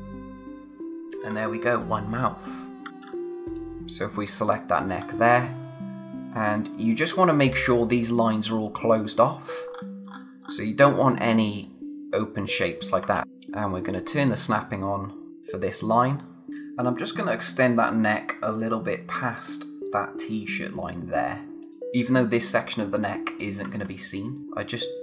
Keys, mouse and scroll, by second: 0.0 click, 0.8-1.3 scroll down 1, 2.9 space, 3.5 click, 5.0-6.0 scroll up 1, 8.8-10.1 scroll down 1, 11.6 click, 13.1 ctrl+z, 13.2 click, 15.6 click, 23.9 alt+click.